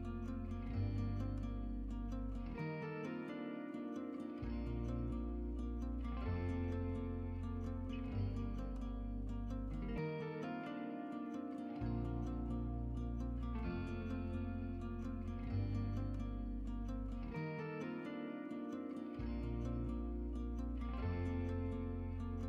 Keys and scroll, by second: 11.0 shift+Tab, 11.5 shift+Tab, 21.9-22.4 typing.